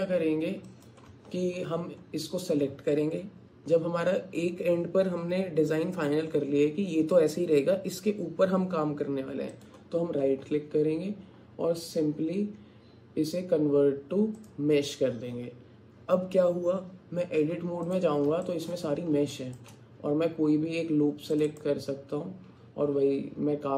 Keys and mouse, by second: 17.4 Tab, 18.4 click, 19.3 shift+click.